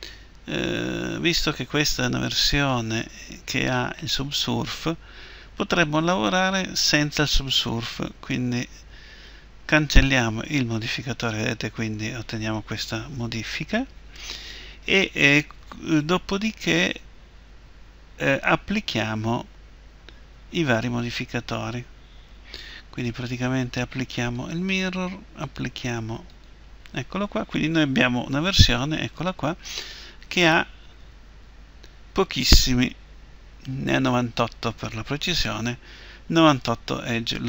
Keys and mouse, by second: 0.3 Tab, 1.6 Tab, 6.6-12.0 drag, 23.3-28.0 drag, 28.6 Tab, 31.0 a, 31.3 a.